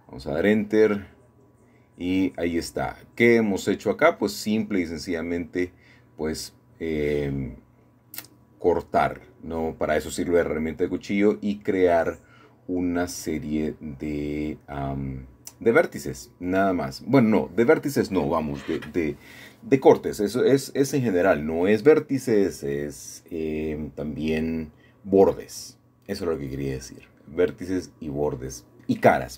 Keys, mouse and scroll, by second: 0.0-1.0 drag, 3.6 c, 5.4-8.4 drag, 8.5 Escape, 9.5 middle click, 10.0-11.1 scroll down 1, 11.1 middle click, 11.2-12.2 scroll up 1, 12.7 c, 13.4-16.5 middle drag, 16.5 Escape, 17.2-18.1 scroll down 1, 17.9 middle click, 19.0-21.8 scroll up 2, 21.8 shift+middle click, 23.7-24.7 middle drag, 24.7-25.9 scroll down 1, 26.0-26.8 scroll down 1, 26.2 middle click, 27.1 click, 28.0 middle click.